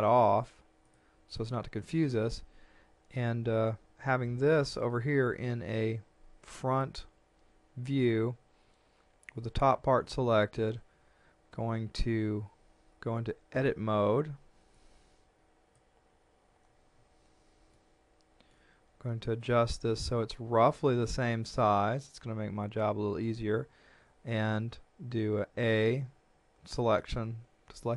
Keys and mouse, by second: 3.7 shift+middle click, 14.8 click, 17.7 shift+middle click, 22.2 shift+middle click, 25.6 a.